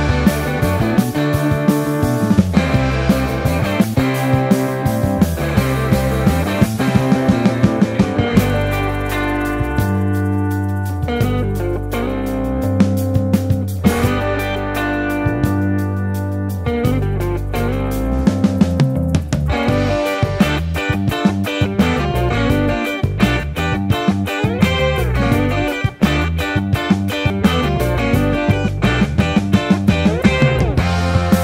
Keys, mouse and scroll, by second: 0.4 ctrl+r, 1.6 Tab, 2.1 Tab, 2.5 ctrl+r, 3.3 Tab, 3.7 KP_1, 4.0 Tab, 4.1 Tab, 5.5 Tab, 5.8 alt+z, 6.6 Tab, 6.7 alt+z, 7.8 g, 8.1 g, 8.2 Tab, 8.9 Tab, 9.3 alt+z, 9.9 s, 10.1 x, 10.2 Tab, 10.3 alt+z, 10.5 Tab, 10.6 Tab, 11.6 KP_1, 12.8 Tab, 13.1 3, 13.5 i, 15.1 ctrl+z, 15.2 e, 17.4 Tab, 18.2 shift+middle drag, 18.6 shift+a, 21.4 ctrl+2, 21.7 s, 21.8 Tab, 22.3 i, 22.6 i, 23.0 3, 24.2 ctrl+z, 24.5 e, 26.1 Tab, 27.8 ctrl+2, 27.9 Tab, 29.9 Tab, 30.1 Delete, 30.3-31.4 typing.